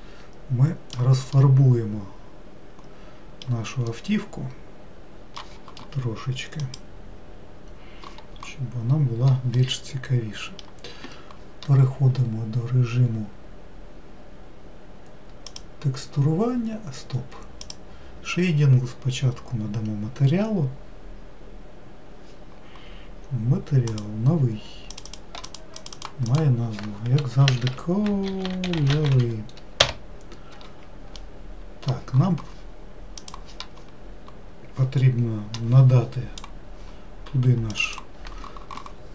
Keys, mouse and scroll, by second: 0.4-7.5 middle drag, 9.4-10.1 scroll down 2, 10.1-13.1 middle drag.